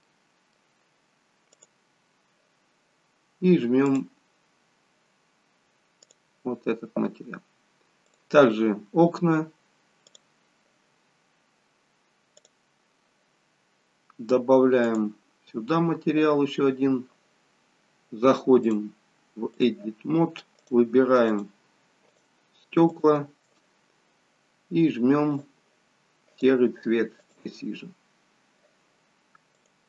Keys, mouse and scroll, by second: 0.1-0.8 scroll up 1, 0.8 middle click, 0.9-1.4 scroll up 1, 1.7 click, 4.0 click, 8.2 click, 16.5 click, 21.4 click, 21.5 shift+click, 22.2 shift+click, 25.5 click, 27.4 click, 28.1-29.8 scroll down 2.